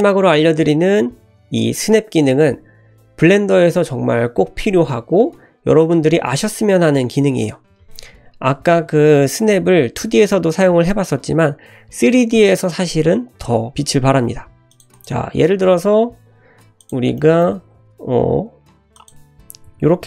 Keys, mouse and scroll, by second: 7.9 scroll down 2, 8.3 `, 8.6-9.5 scroll up 1, 9.5-11.1 scroll up 1, 12.4 scroll down 1, 13.7 click, 14.4 g, 14.9 click, 15.4 shift+a, 17.2-17.6 middle drag, 17.6 s, 19.4 s.